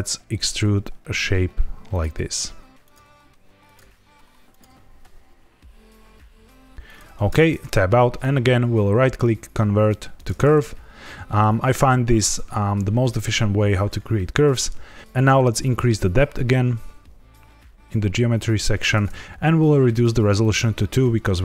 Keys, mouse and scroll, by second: 0.4 click, 0.5 e, 1.9 click, 2.0 e, 2.8 click, 2.9 e, 3.6 click, 3.7 e, 4.4 click, 4.6 e, 6.8 click, 7.2 Tab, 8.0 right click, 10.5 middle click, 15.6 shift+click, 19.8 click, 20.3 click.